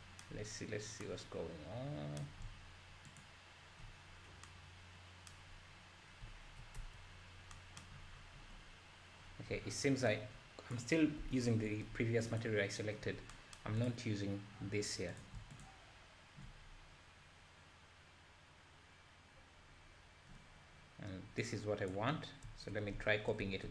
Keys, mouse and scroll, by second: 3.2 ctrl+shift+click, 11.3 Delete, 12.4 click, 13.3-13.8 scroll down 4, 15.1 click, 16.7-17.4 scroll down 1, 17.4-17.8 scroll down 2, 17.9-18.5 scroll up 1, 18.8-19.4 scroll up 1, 19.7 scroll down 2, 19.8-20.3 scroll up 2.